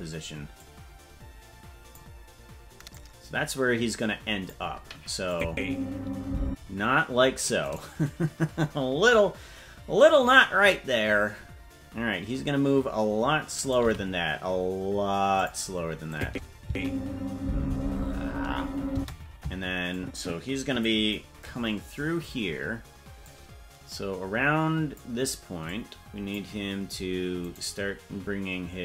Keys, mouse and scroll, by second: 0.6-2.0 drag, 2.9-4.5 drag, 5.3-6.5 drag, 5.4 space, 6.4 space, 7.6 right click, 13.6 right click, 13.8 g, 16.1 click, 16.6 space, 18.9 space, 19.9 click, 21.5-22.6 scroll down 4, 23.2-25.0 drag, 25.6 click, 27.5 right click.